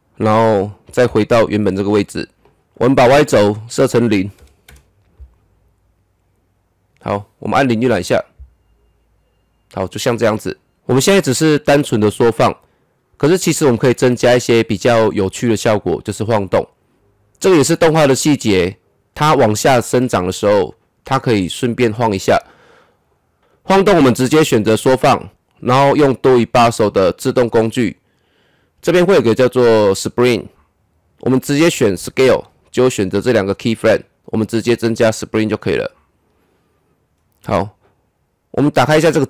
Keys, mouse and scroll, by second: 1.0 shift+Page_Up, 3.7 click, 4.3 KP_0, 4.7 Return, 7.8 KP_0, 10.5 click, 15.2 middle click, 15.2-16.9 middle drag, 24.8 click, 27.1 click, 32.0 click, 35.0 click, 38.8 click.